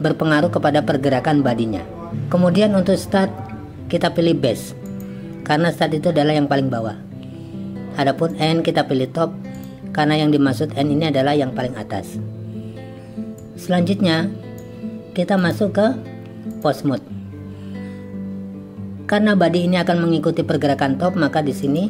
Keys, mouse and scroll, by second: 2.1-5.1 drag, 8.4-9.7 drag, 13.4-14.6 drag, 15.5-16.7 drag.